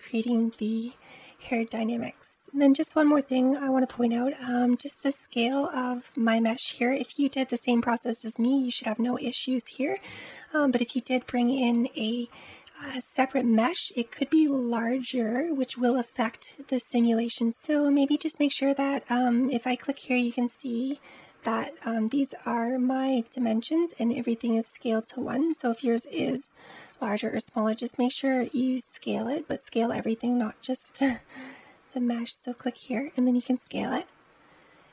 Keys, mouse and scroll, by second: 0.3-0.7 scroll up 3, 0.7-1.4 middle drag, 1.4-2.1 scroll down 2, 2.1-2.7 scroll down 1, 2.7 middle click, 3.2 scroll down 1, 3.3 n, 4.5-4.9 scroll down 2, 4.9-5.3 shift+middle drag, 5.3-6.5 scroll down 1, 6.5-9.5 middle drag, 10.8-14.6 middle drag, 15.7-17.3 middle drag, 19.6 click, 26.8 s, 32.3 click, 33.5 s.